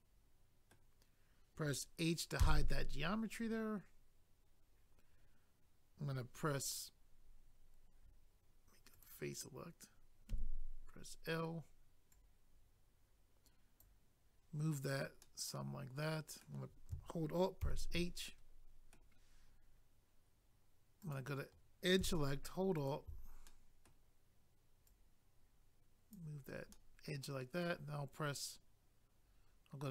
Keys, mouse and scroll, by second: 2.4 h, 8.9 click, 9.0 click, 10.3 i, 12.1 click, 15.2 middle click, 17.6 alt+h, 18.3 middle click, 21.0 click, 21.2 click, 22.8 alt+click, 22.9 alt+click, 23.5 middle click, 24.8 click, 26.4-26.7 scroll down 1, 26.7 middle click.